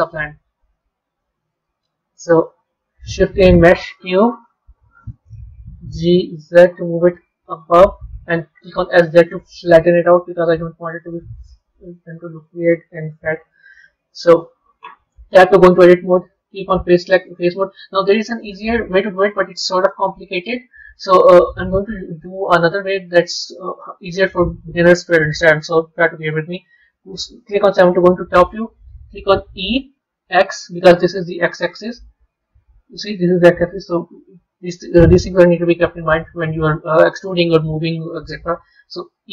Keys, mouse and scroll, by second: 0.7-1.7 middle drag, 1.7-2.7 scroll down 1, 2.7 shift+a, 5.7 g, 8.6 s, 11.7-13.1 middle drag, 13.1 KP_7, 13.7-14.1 scroll up 3, 15.3 b, 16.4-21.0 middle drag, 22.0-23.4 middle drag, 23.4 click, 27.1 KP_7, 32.2 z.